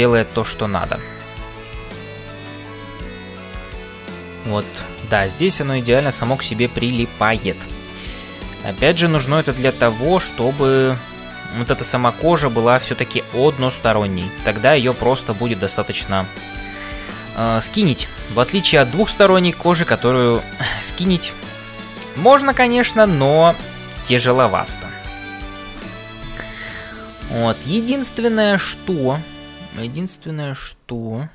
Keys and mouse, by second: 0.0-31.3 typing, 1.8 shift+middle click, 2.5 click, 4.5-7.3 middle drag, 7.6 shift+click, 8.4-9.5 middle drag, 10.1 ctrl+s, 10.8 middle click, 13.6-26.5 middle drag, 27.9-31.3 middle drag.